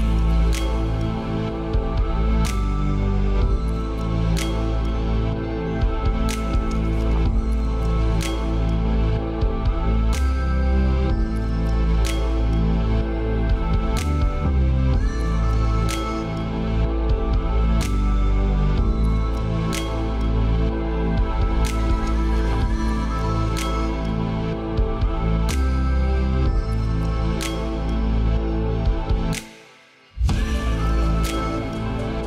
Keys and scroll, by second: 15.1 ctrl+space, 25.9 ctrl+space.